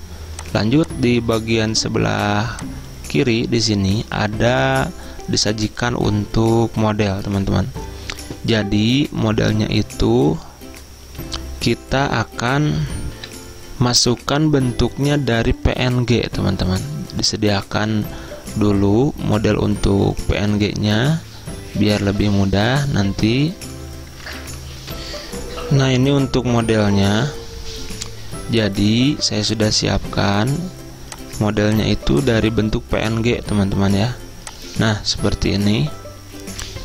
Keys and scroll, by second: 13.2 F10, 24.9 F10.